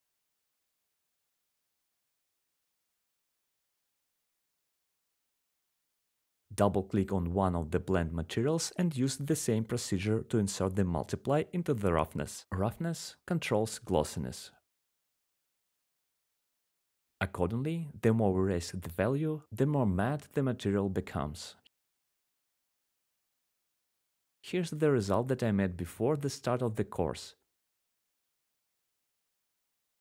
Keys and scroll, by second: 4.8 ctrl+v, 13.0-17.2 typing, 19.7-20.5 typing.